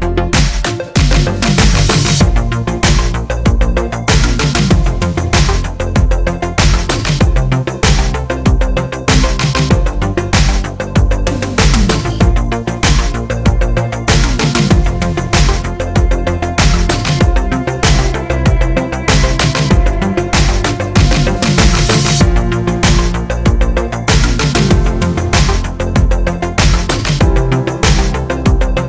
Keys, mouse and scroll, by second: 0.6 middle click, 1.4 Tab, 2.1-4.2 drag, 3.1 KP_0, 3.4 Tab, 3.7 z, 3.8 Tab, 4.2 middle click, 4.3 g, 5.0 middle drag, 5.0 click, 5.1-7.9 middle drag, 5.7 g, 7.9 click, 8.3-9.7 middle drag, 9.7 click, 9.9 Tab, 10.2 alt+click, 10.5 3, 10.6 alt+click, 10.9-14.5 middle drag, 11.1 s, 14.5 click, 14.6 Tab, 14.9 click, 15.7-17.0 middle drag, 16.0 scroll down 2, 17.0 click, 17.2-18.2 scroll up 2, 18.2 shift+c, 18.3 scroll up 2, 18.5 shift+middle click, 19.1 click, 20.0-21.4 right drag, 21.4 click, 22.6 KP_7, 22.8 scroll down 1, 23.0-28.8 shift+middle drag, 23.1-24.5 scroll up 1, 24.5 shift+d, 25.9 click, 26.0 scroll up 1, 26.6 Tab, 26.9 a, 28.4 g, 28.4 click.